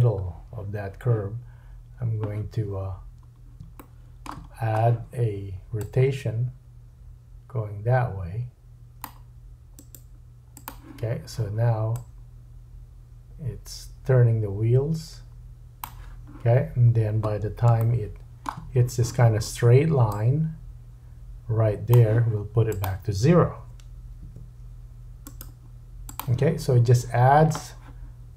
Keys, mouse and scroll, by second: 2.8-3.6 scroll up 4, 3.8 shift+middle click, 4.5-5.7 scroll up 1, 5.7 click, 9.7 right click, 11.2-12.0 drag, 11.2-12.0 middle drag, 11.2-12.0 right drag, 16.5-17.7 scroll down 4, 17.8 shift+click, 17.8 shift+middle click, 17.8 shift+right click, 20.1 click, 22.7 click, 25.2 right click.